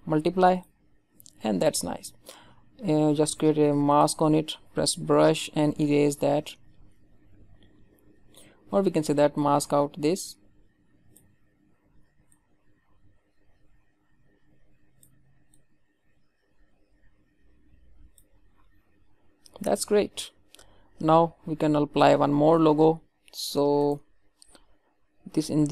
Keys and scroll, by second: 11.5 ctrl+alt+z.